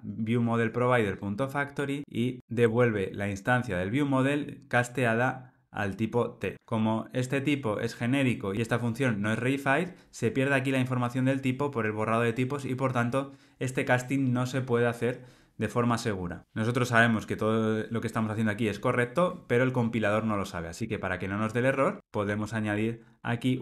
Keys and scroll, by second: 23.0 Escape.